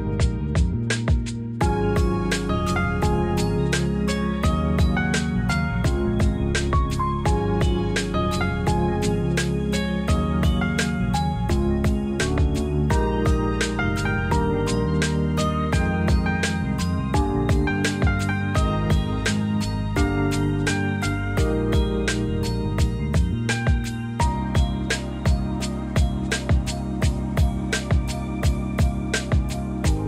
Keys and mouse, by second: 0.6 s, 4.0 click, 5.0 click, 6.9 click, 10.0 ctrl+r, 12.7 ctrl+b, 16.3 click, 19.7 shift+click, 20.5 g, 20.7 y, 22.0 click, 22.2 ctrl+z, 22.8 click, 24.0 shift+click, 24.8 g, 25.0 y, 27.1 click, 27.3 Tab, 28.1 Tab.